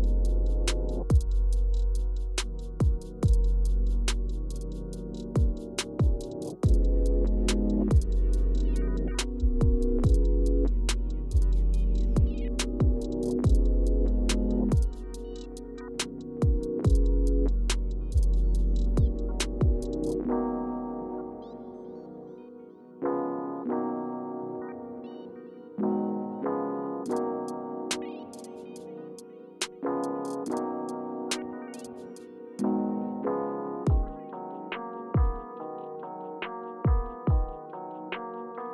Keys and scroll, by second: 24.2 Return, 25.1 Up, 26.1 Return, 26.9 Return, 28.4 Left, 29.1 Return, 33.5-35.1 typing, 33.7 Return, 36.1 shift+\, 37.5-38.3 typing.